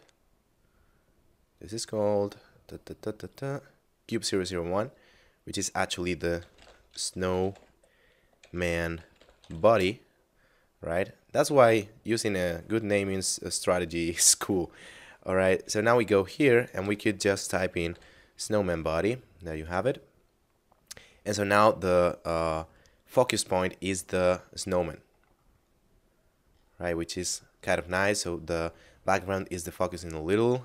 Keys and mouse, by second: 0.3 middle click, 5.5 click, 6.1-7.4 typing, 9.0 b, 9.5 y, 9.7 Return, 15.6 right click, 16.6 click, 16.8 s, 17.9 typing, 19.5 click, 30.4 click.